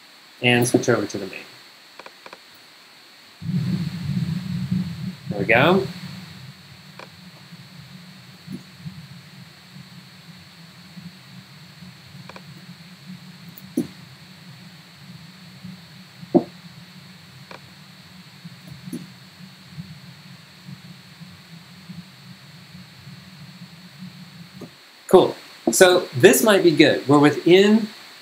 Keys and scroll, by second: 0.7 super+Tab, 2.7 super+Tab, 3.3 super+g, 8.1-8.9 typing, 13.3-14.1 typing, 18.4-19.2 typing, 24.6 g.